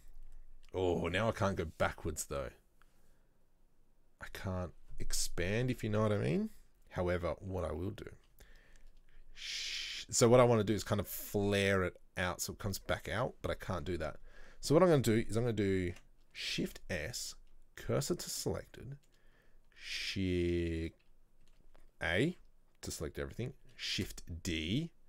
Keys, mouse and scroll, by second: 18.1 shift+s, 21.5 a, 24.0 shift+d.